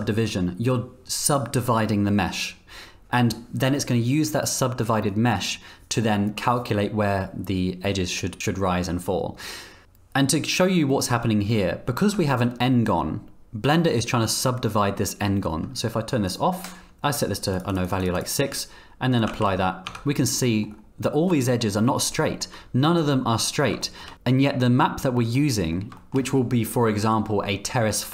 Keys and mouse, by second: 12.1 Tab, 15.5 Tab, 16.3 click, 17.7 click, 17.8 click, 18.0 click, 18.1 click, 18.3 click, 19.3 ctrl+a, 19.8 Tab, 20.4 click, 22.1 shift+click, 23.8 shift+click, 24.1 z, 25.3 click, 25.9 shift+drag.